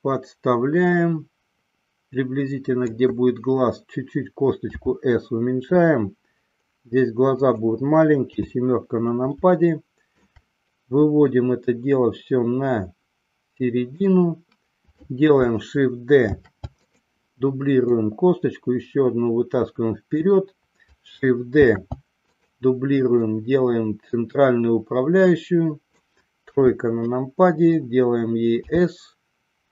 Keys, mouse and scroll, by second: 4.8 s, 8.4 KP_7, 9.6 shift+middle click, 11.4-14.1 drag, 16.4 shift+d, 17.0 click, 18.1-20.2 drag, 21.8 shift+d, 23.4-26.1 drag, 26.8 KP_3, 28.9 s.